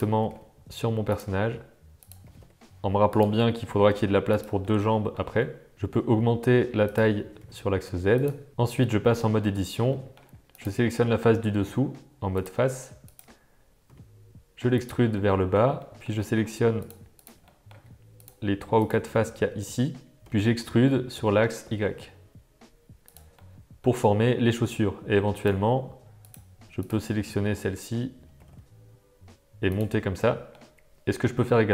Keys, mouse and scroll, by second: 0.2 g, 1.4 s, 2.2 g, 3.8 g, 4.7-5.1 middle drag, 5.4-5.7 shift+middle drag, 5.7 s, 7.3 g, 9.1 Tab, 9.5 shift+middle click, 9.9 middle click, 10.6 click, 10.9 middle click, 12.3 click, 13.9 e, 15.2 middle click, 15.8 shift+click, 16.1 middle click, 17.1 shift+click, 17.4 middle click, 18.2 shift+click, 19.1-20.2 middle drag, 20.2 e, 23.4 middle click, 25.3 click, 26.2 click, 26.7 shift+click, 27.1 middle click, 28.3 g, 30.1 middle click.